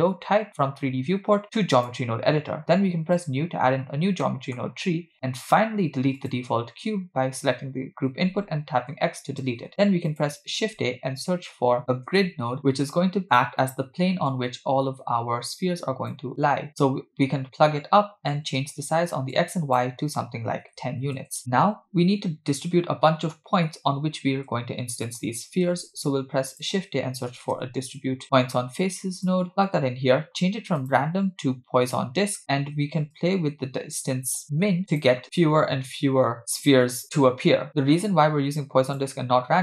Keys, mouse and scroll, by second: 3.2 click, 4.2 middle click, 4.7-6.1 scroll up 6, 5.5 middle click, 6.2 click, 8.1 x, 9.5 shift+a, 14.3-16.1 drag, 19.3-21.2 shift+drag, 25.1 click, 25.7 shift+a, 29.9-30.6 scroll up 2, 30.8-32.0 drag, 33.2-35.1 shift+drag, 35.4-36.0 scroll up 4, 38.0-39.0 drag.